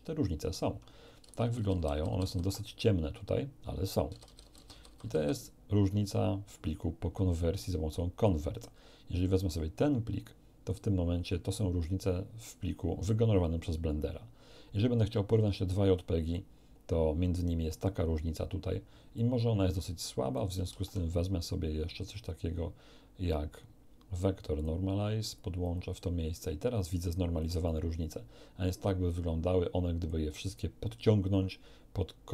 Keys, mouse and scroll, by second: 1.2 alt+v, 1.4 alt+v, 1.5 alt+v, 4.1 v, 4.2 v, 7.5 click, 9.3-10.9 drag, 15.3 click, 19.1-20.5 drag, 20.7 shift+a, 24.5 click, 25.6 click, 26.3 click, 29.1 click.